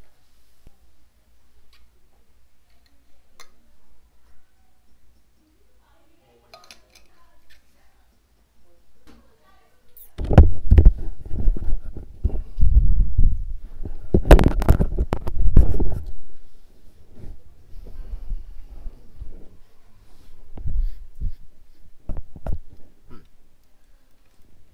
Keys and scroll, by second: 24.3 ctrl+space.